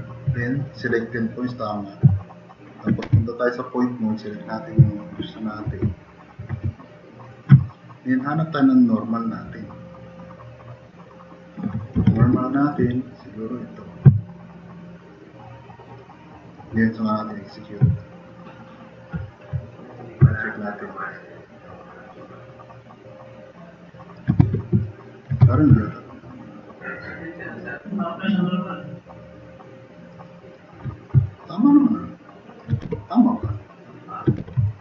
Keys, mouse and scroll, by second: 3.0 1, 12.0 3, 15.9 click, 22.8 click, 24.4 w, 25.5 w, 31.9-32.2 drag, 32.9 w, 34.4 w.